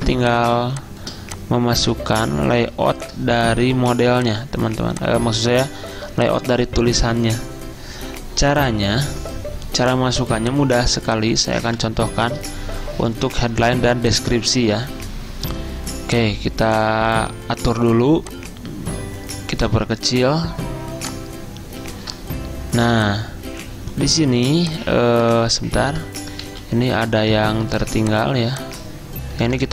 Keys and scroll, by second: 0.0 ctrl+d, 3.1 ctrl+g, 10.2 z, 11.5-12.2 typing, 25.4 ctrl+z, 25.6 ctrl+z, 25.8 ctrl+z, 27.7 ctrl+alt+2.